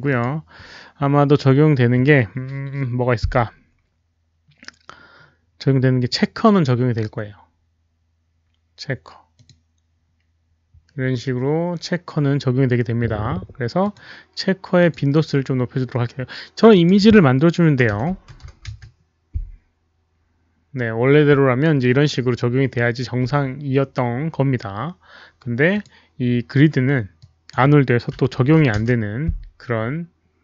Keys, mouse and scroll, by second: 0.0 Escape, 0.0 click, 2.1 click, 2.1 right click, 4.3-4.6 scroll down 1, 4.6-4.9 scroll up 1, 6.0 click, 9.3 click, 10.8 click, 13.8 click, 14.8 click, 16.5 click, 17.8-18.6 typing, 18.3 Tab, 18.3 click, 18.6 Return, 18.6 Tab, 18.6 click, 20.1 Tab, 20.1 click, 20.1 KP_0, 20.1 KP_4, 24.6 click, 24.6 KP_4, 25.7 click, 27.3 Return, 27.3 Tab, 27.3 click, 27.3-28.7 typing, 27.4 Return, 27.4 Tab, 28.7 Return, 28.7 Tab, 28.7 click.